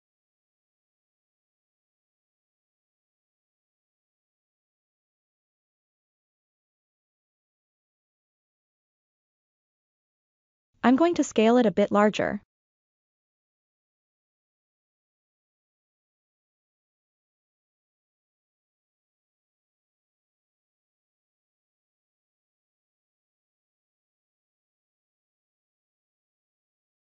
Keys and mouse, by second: 7.5-8.2 middle drag, 9.4 s, 10.1 click, 12.0 click, 12.5-13.3 right drag, 14.0-15.9 drag, 16.5-17.7 middle drag, 18.2 g, 18.7-21.1 drag, 21.9 KP_1, 23.6-24.0 ctrl+middle drag, 24.3 shift+middle drag, 25.1-25.8 ctrl+middle drag, 26.0 shift+middle drag, 26.5 ctrl+middle click.